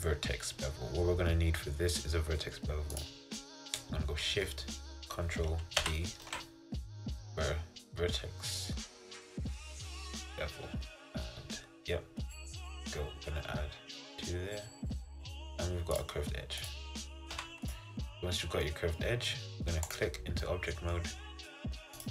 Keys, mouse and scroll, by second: 3.1 click, 5.9 ctrl+shift+b, 16.7 click, 17.4 Tab, 17.8 click, 18.1-20.0 middle drag, 20.0 click, 20.5-22.1 middle drag.